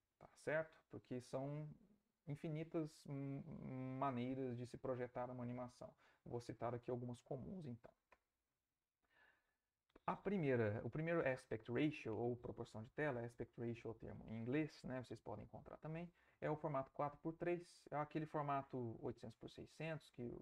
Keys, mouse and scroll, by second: 8.1 Right.